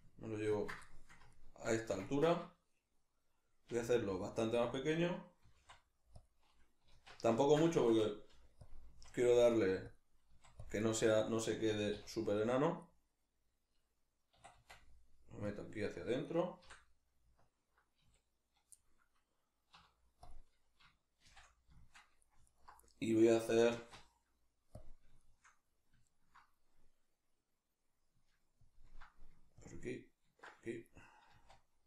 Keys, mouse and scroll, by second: 0.6 ctrl+click, 0.9-4.7 shift+middle drag, 3.7 s, 4.7 click, 5.4 g, 6.3 click, 6.9 alt+o, 7.4-8.7 ctrl+middle drag, 8.3 g, 8.7 click, 8.9 s, 9.9 click, 10.3 s, 10.7 click, 10.8-12.6 middle drag, 11.7 g, 12.6 click, 12.8-15.5 middle drag, 14.5 e, 15.5 click, 16.2 right click, 16.7 l, 18.7-22.5 middle drag, 19.7 z, 21.3 shift+n, 22.5 alt+right click, 22.9-28.6 middle drag, 23.8 alt+q, 28.6 ctrl+click, 29.6 ctrl+click, 31.3 z.